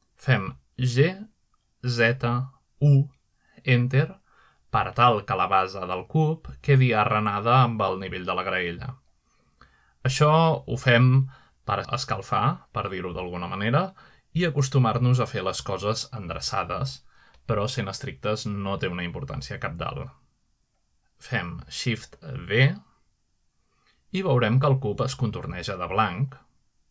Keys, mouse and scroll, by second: 0.0 click, 3.1-4.3 typing, 4.9 Return, 6.3-8.6 middle drag, 9.2-9.9 middle drag, 13.3-13.7 middle drag, 16.2 shift+middle click, 16.8 shift+middle drag, 19.2-20.0 middle drag, 19.6-20.2 scroll up 1, 20.2-21.2 scroll down 1, 21.2-21.9 middle drag, 22.3-22.7 scroll down 2, 22.7-23.9 shift+middle drag, 24.1 shift+d.